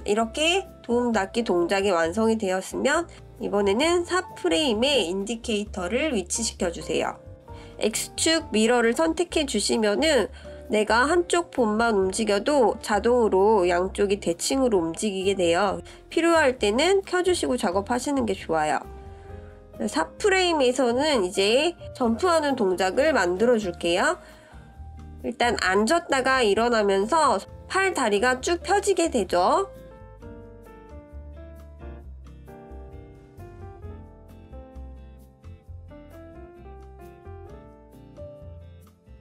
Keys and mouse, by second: 3.8 shift+KP_3, 5.4-10.6 drag, 14.4-15.2 middle drag, 17.1 click, 18.2-19.3 middle drag, 20.3 click, 21.5 ctrl+KP_3, 28.8 click, 30.5 click, 33.1-37.0 drag, 38.0-39.2 drag.